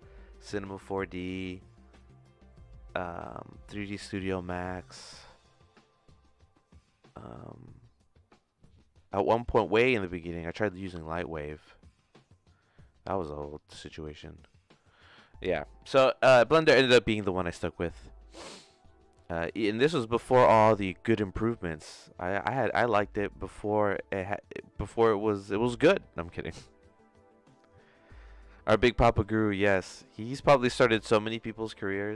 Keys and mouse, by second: 17.6-32.1 drag.